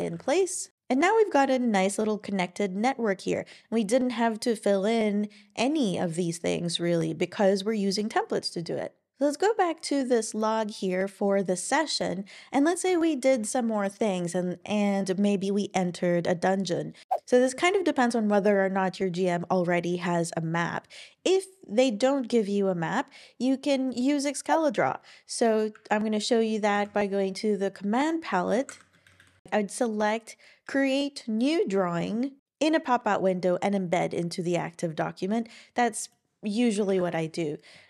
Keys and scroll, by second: 12.9 Return, 13.3 Return, 26.7 super+p, 28.3-29.9 typing, 36.9 ctrl+alt+i.